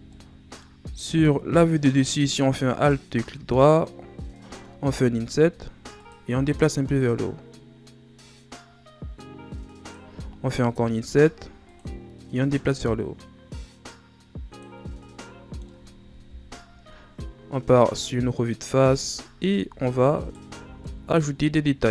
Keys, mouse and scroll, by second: 0.1 middle click, 0.8-1.4 shift+scroll up 5, 2.6 alt+right click, 4.9 i, 6.9-9.9 drag, 10.6 l, 12.5-14.7 drag, 14.7 Tab, 15.0 scroll down 1, 15.2 middle click, 16.1 KP_1, 17.2-18.0 scroll down 10, 18.0-18.8 scroll up 4, 18.8 Tab, 19.3 ctrl+scroll up 1, 19.6 z, 20.1 right click, 20.5 b.